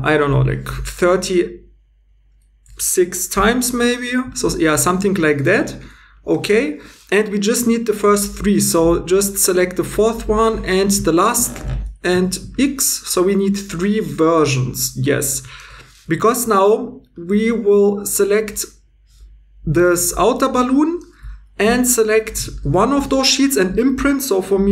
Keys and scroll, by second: 0.8 scroll down 1, 12.1 x.